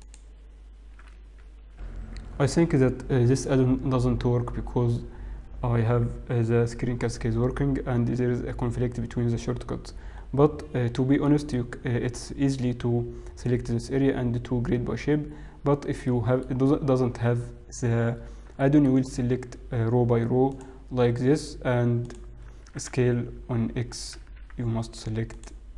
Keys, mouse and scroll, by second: 0.0 click, 0.2 click, 11.2 middle click, 15.5-16.0 scroll up 2, 16.0 middle click, 16.8-17.2 scroll up 1, 17.2 scroll down 3, 18.6 shift+middle click, 19.0-20.7 scroll up 1, 20.7 click, 22.0 alt+click, 22.6 s.